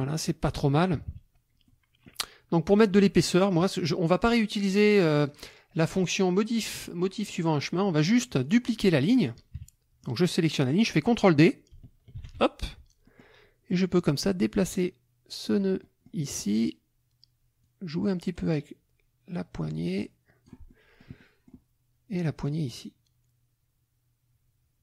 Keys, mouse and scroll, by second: 0.2 middle click, 1.0 KP_Subtract, 1.6 middle click, 2.9 click, 5.3 click, 7.5 click, 8.4 click, 9.5 KP_Subtract, 12.2 ctrl+d, 13.1 click, 14.1-15.7 drag, 15.8 click, 17.6 click, 18.4-19.2 scroll down 2, 19.2-20.7 scroll down 1, 20.7 click, 22.5-24.8 drag.